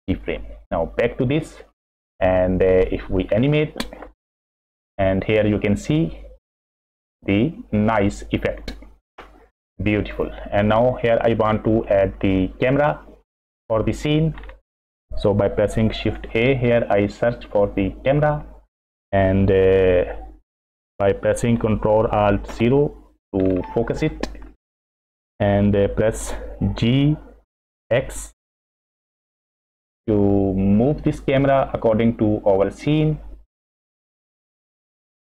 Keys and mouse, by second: 0.0 click, 1.0 drag, 1.7-2.8 middle drag, 2.8 click, 3.5-5.4 middle drag, 4.8 space, 6.2-7.2 middle drag, 9.0 space, 10.1 click, 11.0 click, 11.8-12.5 middle drag, 13.0-14.1 middle drag, 16.1 shift+a, 19.7 shift+middle click, 22.5 ctrl+alt+KP_0, 26.9 g.